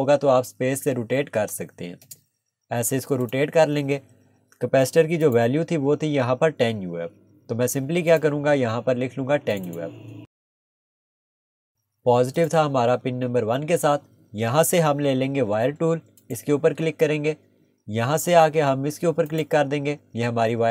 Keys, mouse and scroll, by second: 2.0 space, 3.2 click, 4.2 Escape, 5.2 click, 8.1 click, 11.3 click, 14.9 Escape, 16.2 click, 17.9 scroll, 18.0 scroll up 1, 19.3 click.